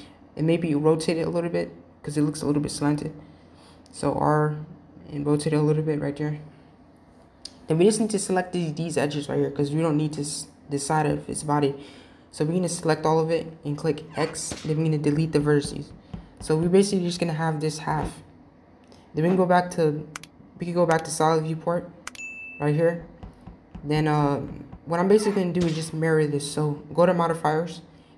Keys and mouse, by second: 3.6 r, 9.8-11.0 drag, 13.5 x, 18.4 z, 23.0-23.8 shift+middle drag.